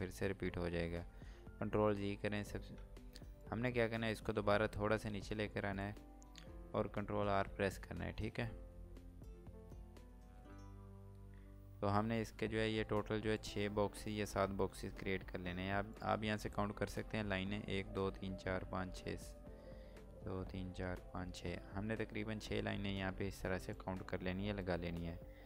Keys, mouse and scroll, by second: 2.8 typing, 3.4 click, 5.6 ctrl+right click, 9.0 typing, 13.3 click, 23.7 click.